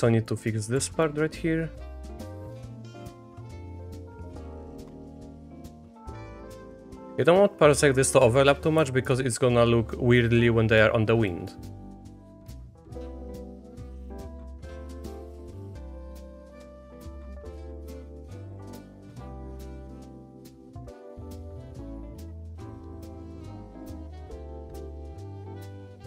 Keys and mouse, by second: 0.3 middle click, 0.8 1, 2.0 click, 2.9 click, 3.5-4.5 drag, 4.6 middle click, 4.8 shift+middle click, 5.5 click, 6.3 Tab, 6.5 middle click, 7.0 Tab, 7.3 click, 7.6 click, 8.6 Tab, 9.0 click, 9.9 click, 10.5 shift+drag, 11.7 shift+click, 12.7 middle click, 13.0 shift+middle click, 14.2 middle click, 14.5 shift+middle click, 14.7 Tab, 14.9 middle click, 15.3 middle click, 15.6 click, 15.8 click, 16.0 shift+click, 16.1 click, 16.7 click, 17.3-18.3 drag, 18.5 middle click, 18.8 shift+middle click, 19.4-20.4 drag, 20.8 click, 21.5 click, 22.4 click, 23.0 middle click, 23.2 shift+click, 23.6 click, 24.2 click, 24.9 click, 25.2 click, 25.7 click.